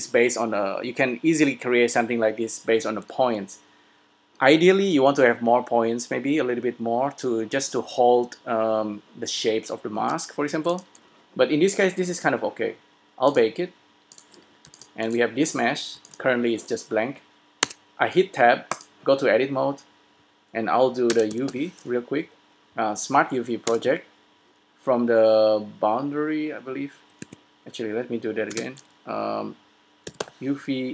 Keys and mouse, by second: 10.8 s, 13.4-15.4 drag, 15.0 s, 16.1 click, 16.4 s, 17.8 Tab, 21.4 space, 23.1 Down, 28.8 space.